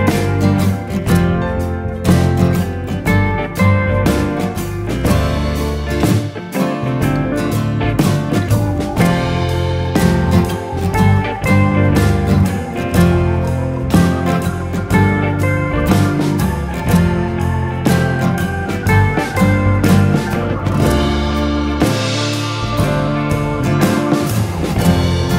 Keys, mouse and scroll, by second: 2.8 click, 5.3 alt+click, 7.3 click, 15.6 Left, 23.3 click.